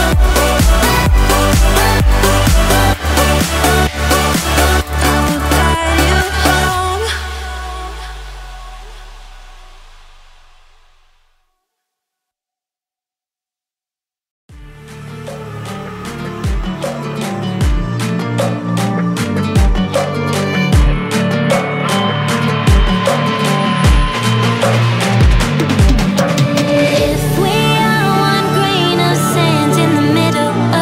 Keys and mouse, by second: 0.6-4.9 drag, 10.8 click, 18.0-20.6 drag, 27.2-29.3 drag.